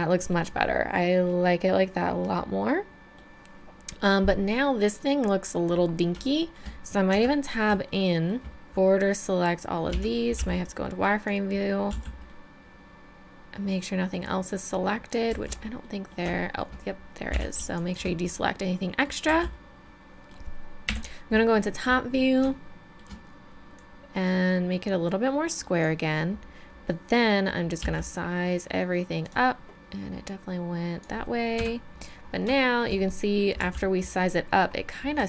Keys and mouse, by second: 1.2-2.1 middle drag, 2.5-6.5 middle drag, 7.1 Tab, 8.6 a, 8.6 b, 9.9 z, 10.4 b, 11.9 z, 12.3 middle click, 13.2 middle click, 15.3 z, 15.8 click, 17.3 b, 18.9 click, 19.3 z, 20.9 KP_7, 21.4 middle click, 23.8 middle click, 24.1-25.8 drag, 27.8 s, 29.7-31.6 drag, 31.6 KP_3, 31.7 middle click, 32.7 middle click, 33.6 z.